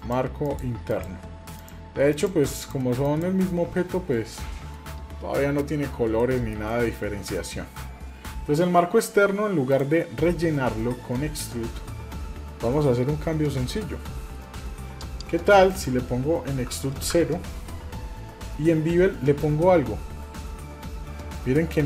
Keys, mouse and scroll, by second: 0.0 click, 0.5 click, 0.9 click, 1.6 click, 2.1 click, 2.6 click, 3.0 click, 6.2 middle click, 6.7 shift+middle click, 7.2-7.6 scroll up 2, 9.7 click, 15.7-17.4 drag, 19.4-21.8 drag.